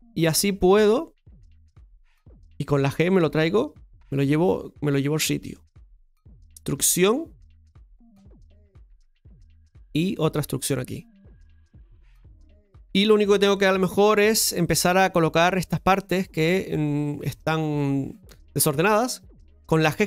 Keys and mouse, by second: 12.9 middle click, 14.3 KP_7, 14.8 middle click, 17.3-18.5 drag, 18.5-20.0 right drag.